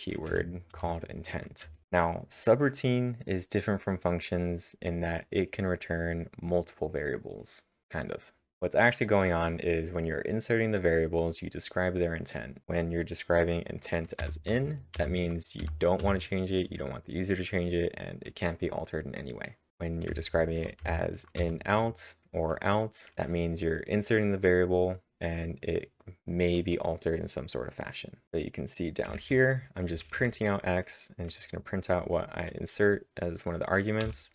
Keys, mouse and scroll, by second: 0.5-2.3 typing, 14.0-14.7 typing, 15.8-16.5 typing, 17.8 typing, 19.7-21.4 typing, 23.1 h, 29.1 typing, 34.0 typing.